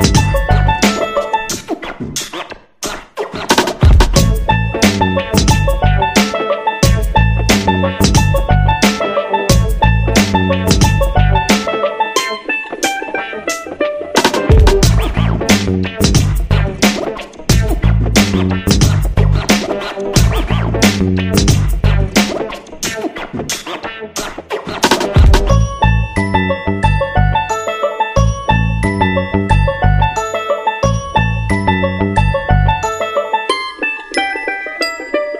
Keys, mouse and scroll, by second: 2.5 click, 7.2 click, 11.3 Right, 12.7 Left, 13.5 shift+click, 13.9 shift+click, 15.3 click, 19.5 ctrl+scroll up 1, 20.4-33.7 ctrl+drag.